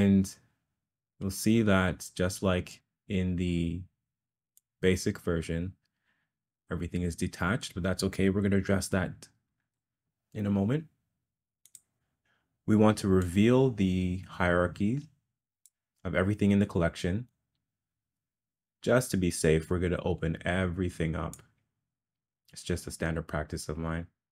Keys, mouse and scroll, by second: 1.4 middle click, 2.8 click, 4.7 click, 9.5 Escape, 11.6 click, 13.2 click, 13.5-15.7 drag, 17.3-21.4 drag, 23.9-24.3 drag.